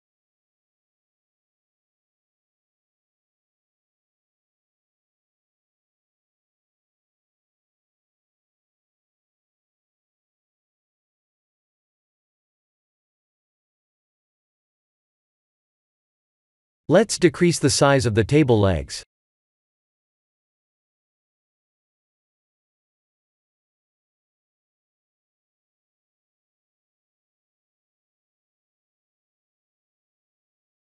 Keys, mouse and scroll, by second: 0.3 middle click, 0.4 middle click, 6.5 middle click, 6.7 middle click, 6.8 middle click, 6.9 middle click, 7.0 middle click, 7.3 middle click, 7.5 middle click, 7.6 middle click, 8.1 middle click, 9.4 click, 12.1 click, 13.4 s, 16.1 ctrl+z, 17.2 click, 18.0 s, 19.5 ctrl+z, 21.1 click, 27.0 s.